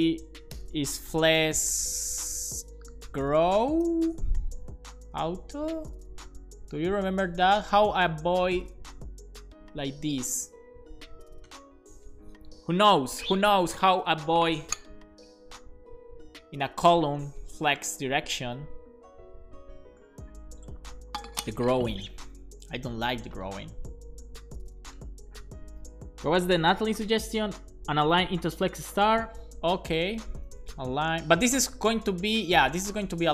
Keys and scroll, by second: 0.9-2.0 typing, 3.6 Down, 3.9 Return, 4.8-5.7 typing, 7.0 shift+super+Left, 7.4 BackSpace, 7.7 super+s, 30.3 Return, 30.4-31.4 typing, 32.5-33.3 typing.